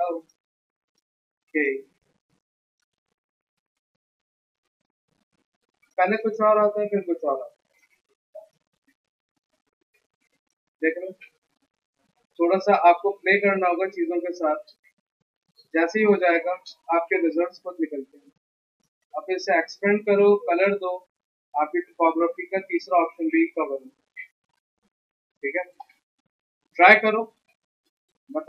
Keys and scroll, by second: 3.6 ctrl+alt+x, 4.2 ctrl+alt+c, 5.2 ctrl+z, 5.6 v, 9.5 ctrl+alt+c, 15.1 ctrl+alt+2, 15.9 ctrl+x, 19.5 s, 20.2 v, 25.9-27.2 typing.